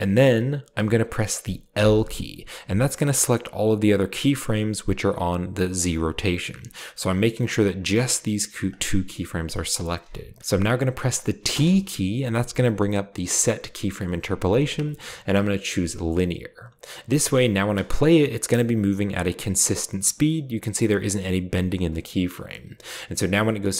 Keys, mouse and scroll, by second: 1.7 i, 6.7 g, 8.6-9.4 drag, 11.5 t, 16.1 click, 16.8-17.6 scroll up 1, 17.6 space, 18.8-20.0 drag, 23.5 click.